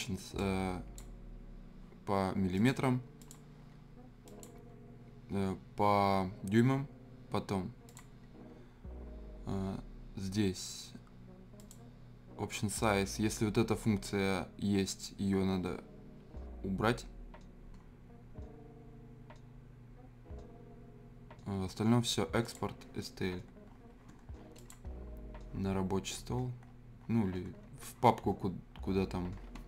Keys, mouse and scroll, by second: 0.3-2.5 drag, 7.8 click, 11.6 click, 20.8-22.4 scroll down 1, 22.4 click, 23.4 scroll down 1, 23.7-24.5 scroll, 24.5 click, 25.8-27.0 scroll down 1, 27.0-27.9 scroll, 27.9-29.6 scroll up 1.